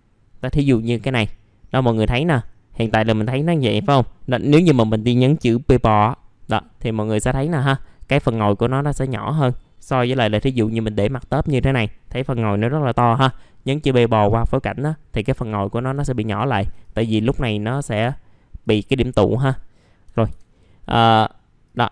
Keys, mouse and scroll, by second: 2.2 middle click, 2.4-3.9 scroll down 1, 3.9 middle click, 5.8 p, 6.4-6.8 scroll down 1, 7.1 middle click, 10.7-13.2 scroll down 1, 14.4-15.3 scroll up 1, 15.4 alt+middle click, 16.0-16.4 scroll down 1, 16.4 alt+middle click, 16.8 click, 17.1 F4, 17.7 click, 18.6-19.8 drag, 19.8 scroll up 1, 20.5-21.6 scroll down 1, 21.6 click.